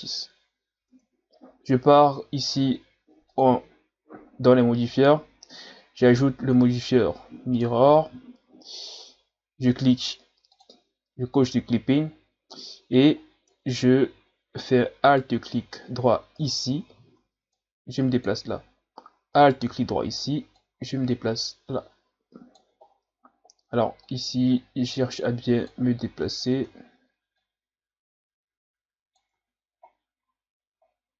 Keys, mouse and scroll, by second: 0.1 scroll down 1, 0.9 Tab, 1.6-2.4 ctrl+scroll up 1, 3.3-6.3 drag, 9.0-10.3 scroll up 1, 10.3 scroll up 2, 10.6 click, 12.0-12.9 scroll up 3, 12.9-13.5 scroll up 1, 13.5 Tab, 15.1 alt+right click, 16.4 alt+right click, 17.0 scroll down 1, 17.5-19.4 drag, 19.4 alt+right click, 20.6-22.8 drag, 22.8-23.4 scroll up 6, 24.0-26.1 drag, 26.1 Tab, 26.5 Tab, 27.3-29.3 drag, 29.3 Tab, 29.9 scroll down 4, 30.8-31.1 scroll down 1.